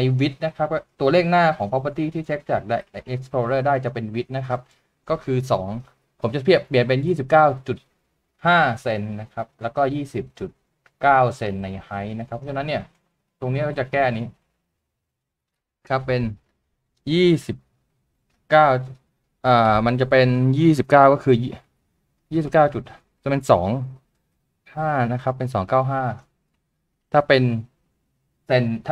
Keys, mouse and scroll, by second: 17.6 2, 19.8 typing, 22.5 typing.